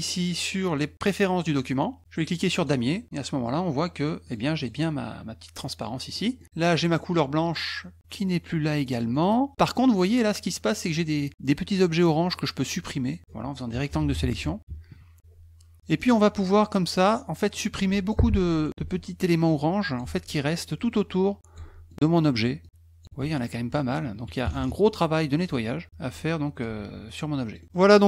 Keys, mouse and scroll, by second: 1.4 click, 2.5 click, 4.2 click, 4.6 click, 5.8 middle click, 6.4 middle click, 7.0 middle click, 8.8 middle click, 9.1 middle click, 9.1 scroll up 2, 10.9 click, 12.3 click, 16.0 middle click, 16.0-16.4 scroll, 16.2 middle click, 16.4 middle click, 16.5 scroll up 2, 17.5 click, 19.5 click, 20.3 middle click, 20.3 scroll down 1, 20.9 click, 21.9 middle click, 22.6 click, 23.2 middle click, 25.4 click, 26.0 click, 28.0 click.